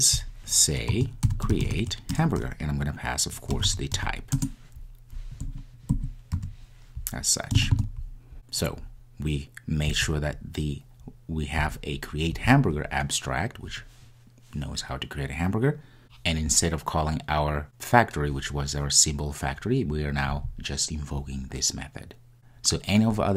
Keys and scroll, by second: 2.1 Return.